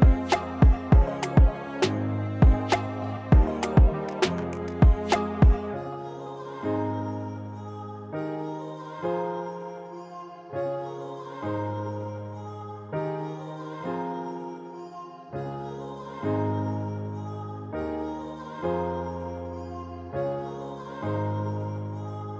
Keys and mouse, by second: 1.8 click, 2.4 g, 7.0 g, 10.3-11.4 drag, 13.6 click, 13.8-15.0 drag, 15.3-16.7 drag, 16.3 s, 19.2 click, 19.9 g.